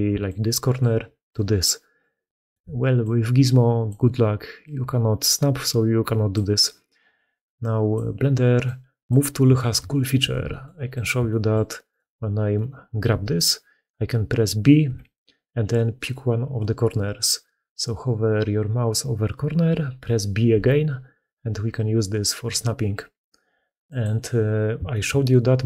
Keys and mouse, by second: 0.1 click, 1.8 click, 2.4 d, 2.8 d, 2.9-3.7 drag, 4.5-6.2 drag, 7.5 click, 8.5-8.9 drag, 9.4-9.8 shift+middle drag, 10.2 alt+d, 11.1-11.4 shift+middle drag, 11.7 middle click, 12.4 middle click, 12.9 g.